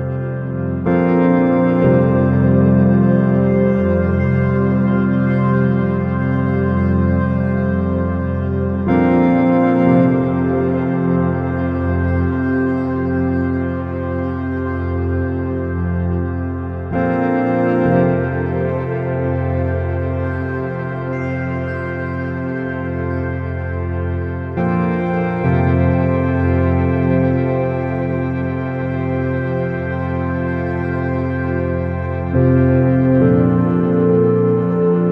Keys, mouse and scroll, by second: 0.2 r, 2.8-4.7 middle drag, 5.6-9.1 middle drag, 6.4-7.6 drag, 8.5 KP_0, 10.5 shift+z, 18.9-20.5 drag, 21.8-23.1 drag, 24.8-26.4 drag, 34.1 shift+z.